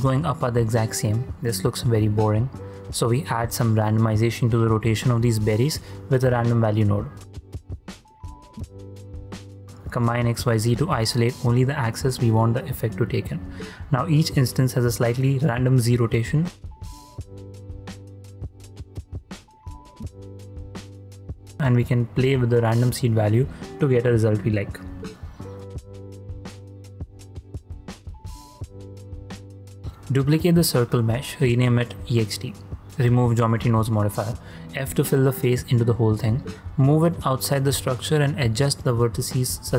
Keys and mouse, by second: 0.2 middle click, 1.0 ctrl+middle click, 1.5 shift+middle click, 2.4-5.3 drag, 5.5 ctrl+z, 6.1 shift+a, 9.2 click, 13.0 click, 13.9-15.4 drag, 17.5-20.9 drag, 21.8-24.2 drag, 24.7 click, 27.3 ctrl+click, 30.6 shift+d, 31.4 click, 32.4 x, 34.1 click, 34.3 F2, 34.7 f, 35.2-37.0 middle drag, 37.4 `, 38.8 g, 39.2 x.